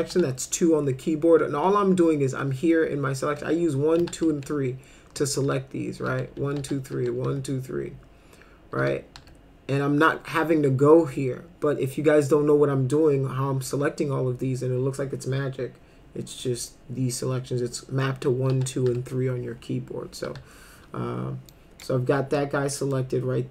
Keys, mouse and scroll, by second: 0.1 2, 3.2-7.8 typing, 8.8 2, 9.2 3, 17.9-20.3 typing, 21.5 click, 22.8 middle click.